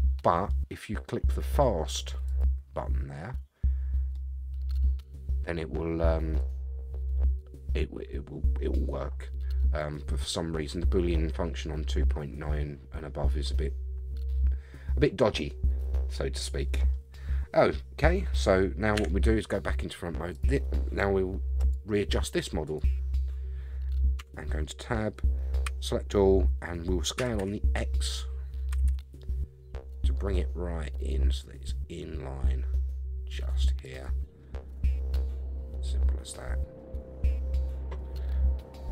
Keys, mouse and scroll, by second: 2.3 click, 4.1-4.7 middle drag, 6.4 click, 9.9-16.9 middle drag, 18.9 KP_1, 20.3 click, 21.6 click, 22.6 click, 24.2 Tab, 25.6 a, 27.2 s, 27.4 x, 28.7 s, 34.4 scroll up 2, 34.8 scroll down 4, 35.2-38.0 middle drag, 38.7-38.9 scroll up 4.